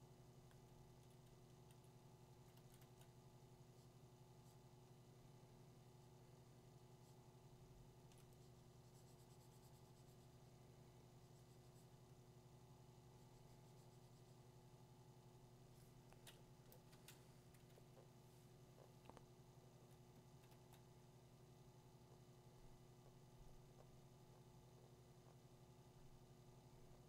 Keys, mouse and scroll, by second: 2.3 [, 2.6 [, 3.5 [, 8.2-11.2 drag, 19.8-22.9 drag, 20.5 2.